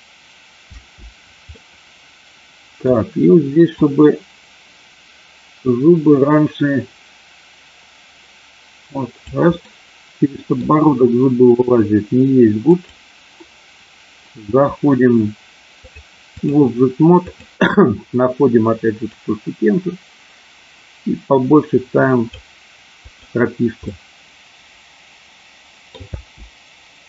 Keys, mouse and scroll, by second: 0.6 space, 1.5-2.9 middle drag, 3.7-9.2 drag, 9.5-10.5 middle drag, 12.6 click, 15.9 click, 19.3-22.3 drag, 23.0 click, 23.9-25.9 middle drag, 26.0 space.